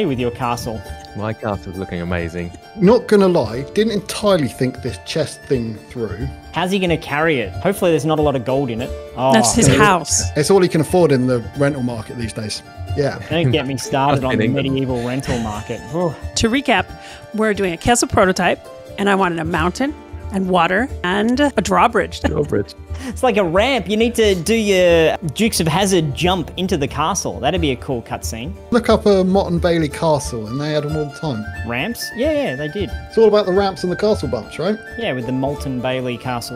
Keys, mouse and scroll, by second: 0.5 click, 0.9 middle click, 19.1 a.